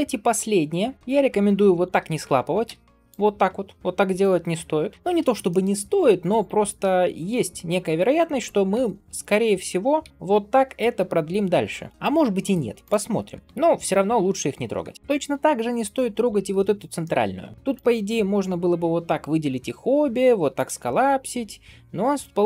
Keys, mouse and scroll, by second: 1.6 shift+click, 2.5 m, 5.2 ctrl+shift+z, 5.3 shift+middle click, 6.2 alt+click, 6.9 shift+middle click, 8.6 g, 9.9 g, 12.7 click, 13.0 scroll down 2, 13.4 shift+middle click, 14.9 shift+middle click, 14.9 scroll up 2, 16.0 alt+click, 16.9 middle click, 17.5 scroll up 1, 17.6 click, 19.8 m.